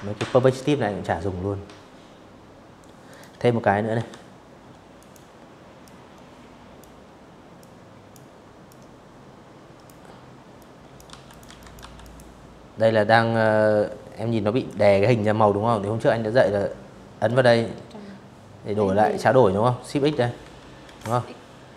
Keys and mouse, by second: 0.7 click, 1.6 p, 2.6 click, 3.5 click, 5.2 click, 6.3-7.5 drag, 8.2-8.6 drag, 8.5-10.0 typing, 8.9 click, 9.2 click, 9.6 click, 16.7 click, 17.8-20.4 typing.